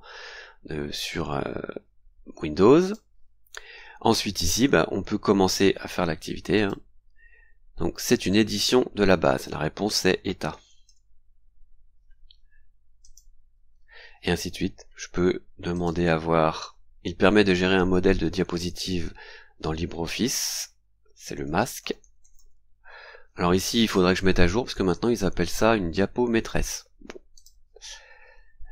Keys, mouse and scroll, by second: 0.9-1.6 scroll down 4, 2.8 click, 4.3-4.6 scroll up 1, 6.5 click, 10.2-11.3 typing, 13.0 click, 15.7 click, 21.2-22.8 typing, 27.3 click.